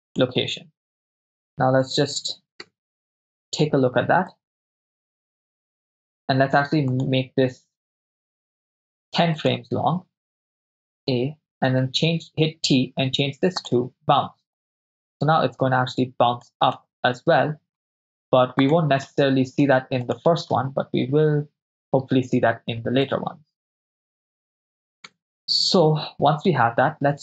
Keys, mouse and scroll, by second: 2.9 KP_0, 4.4-5.2 drag, 5.4 shift+space, 7.0 click, 7.0 right click, 7.8 g, 9.5 click, 11.1 a, 11.8 t, 14.6-16.6 drag, 16.9 shift+space, 18.6 click, 19.2 shift+space, 20.2 drag, 20.6 shift+space, 23.3 click, 25.1 KP_0.